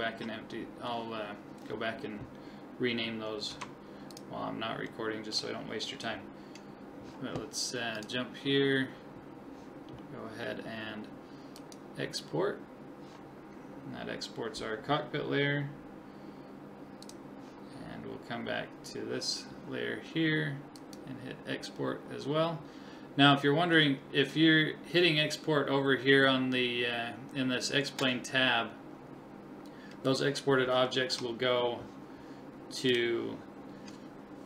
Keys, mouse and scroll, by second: 0.1 a, 3.5 ctrl+s, 4.9-6.9 middle drag, 8.0 click, 10.1-12.2 middle drag, 11.6 click, 17.0 click, 20.8 click, 30.9-32.9 middle drag.